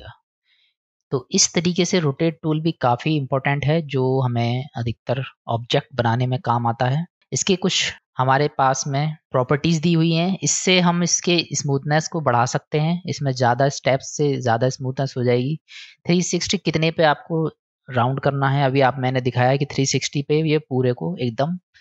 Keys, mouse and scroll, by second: 0.6-1.1 drag, 1.5-2.2 drag, 2.5-3.0 drag, 4.0-4.5 drag, 4.9 click, 6.1 click, 11.0-15.6 drag.